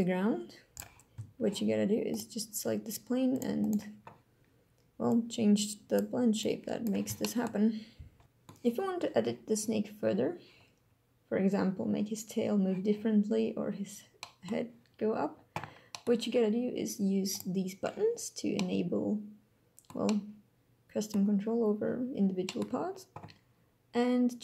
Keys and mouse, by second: 0.7 click, 2.0 click, 5.1 click, 6.3 click, 7.1 shift+click, 8.2 middle click, 14.1 drag, 15.9 click, 17.3 click, 18.5-19.8 drag, 20.0 click, 20.1-21.1 middle drag, 22.4 middle click.